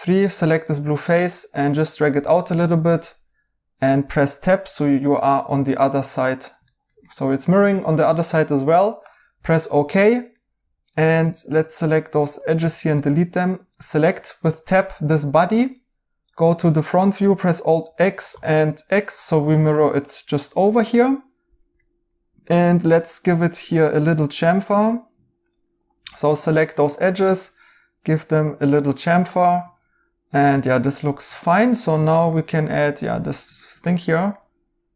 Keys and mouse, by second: 2.0 right click, 2.4 Tab, 6.6 right click, 9.4 right click, 12.5 x, 13.0 right click, 13.6 Tab, 17.8 alt+x, 20.7 right click, 22.2 2, 23.1 right click, 29.6 Tab, 31.3 right click.